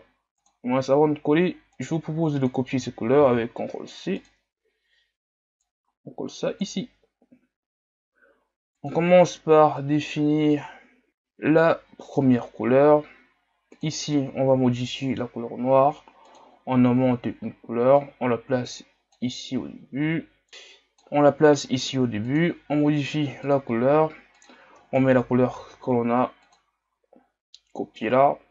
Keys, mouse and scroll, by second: 5.6-6.8 drag, 7.1 scroll up 1, 11.1 click, 12.2-22.4 drag.